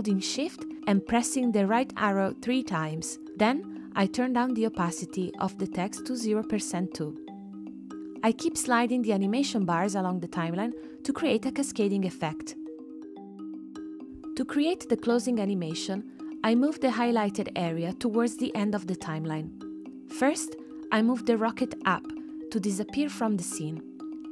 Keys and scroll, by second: 0.0 shift+Right, 4.0 shift+Right, 13.0 space.